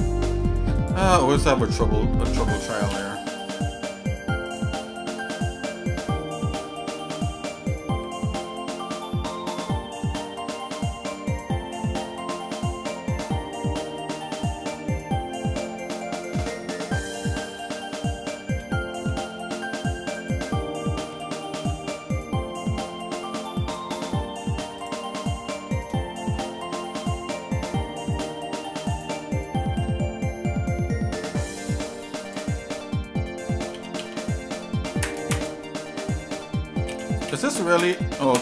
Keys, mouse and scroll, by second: 0.8 click, 1.2 Tab, 2.8 KP_7, 3.4 z, 5.0-5.6 scroll up 3, 5.8 scroll down 1, 7.9 g, 11.7 shift+middle click, 12.4-13.7 shift+middle drag, 14.6 shift+middle click, 16.4 middle click, 18.5 s, 21.1 g, 24.0 z, 25.4 shift+middle click, 26.0 scroll down 1, 26.4 middle click, 26.9 middle click, 28.1 click, 28.9 shift+click, 29.3 middle click, 30.0-31.7 shift+middle drag, 32.2 shift+click, 33.7 s, 36.9 s.